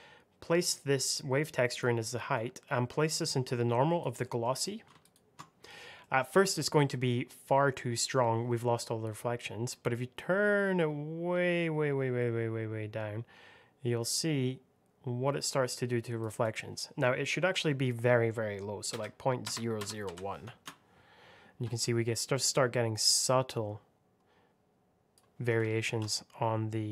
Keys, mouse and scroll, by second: 2.2 click, 4.1 middle click, 4.9 ctrl+shift+click, 5.9 middle click, 6.8 scroll up 1, 9.6 click, 16.3 click, 18.8 KP_Decimal, 19.3 KP_0, 20.0 KP_1, 20.4 Return, 22.8 click, 25.8 ctrl+z, 26.0 click.